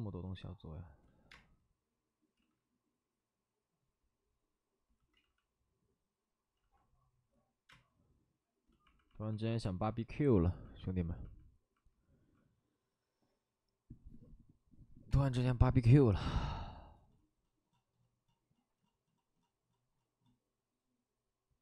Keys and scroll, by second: 0.2 ctrl+z, 1.2 space, 2.3 ctrl+z, 5.1 ctrl+z, 6.5 ctrl+z, 6.5 ctrl+z, 7.6 space.